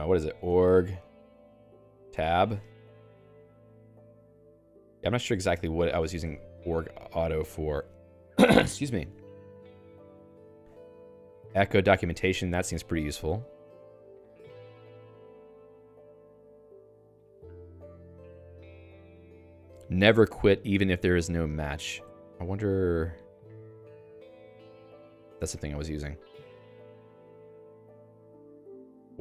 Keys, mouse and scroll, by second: 0.7-2.2 typing, 3.1 Tab, 3.6 Down, 4.3 Tab, 4.5 Return, 5.9 Escape, 6.3 x, 7.3 d, 8.5 j, 12.1 x, 12.3 x, 15.1 ctrl+alt+x, 28.1 Return, 28.9-29.2 typing.